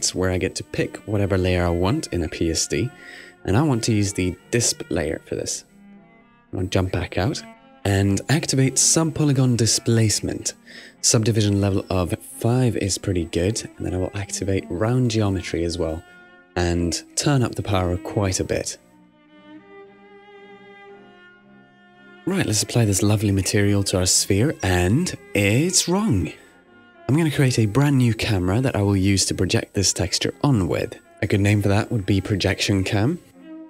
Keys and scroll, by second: 12.6 5, 19.3-20.1 typing, 30.9-32.8 typing.